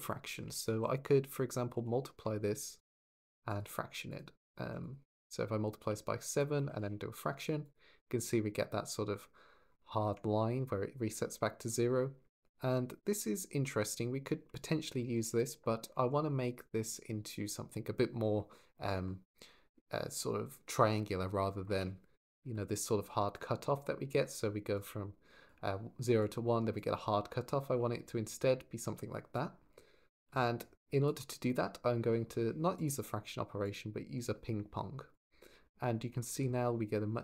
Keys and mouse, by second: 0.3 shift+a, 2.9 click, 3.4-4.0 drag, 4.2 click, 5.0 ctrl+click, 6.0 click, 12.1 shift+click, 22.3-29.5 d, 22.5 click, 24.5 click, 26.0 click, 28.1 click, 30.0-30.9 d, 32.6 click, 33.6-35.0 drag.